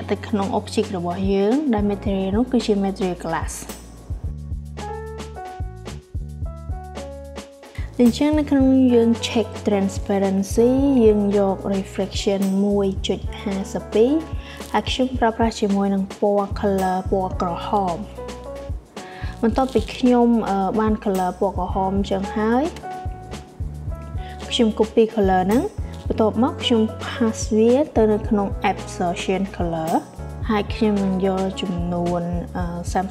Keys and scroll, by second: 3.6-5.1 typing, 30.1-31.1 typing.